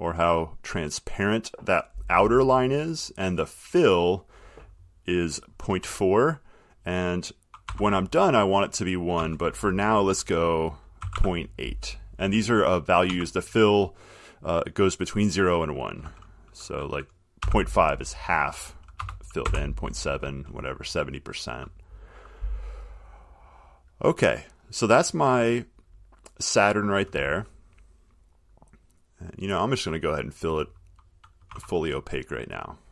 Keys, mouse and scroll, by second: 3.7 click, 7.9 1, 9.4 BackSpace, 11.1-11.8 typing, 13.2 BackSpace, 17.6 5, 19.1 BackSpace, 19.6 7, 23.2 click, 29.8 click, 30.6 click, 31.7 1, 32.2 click.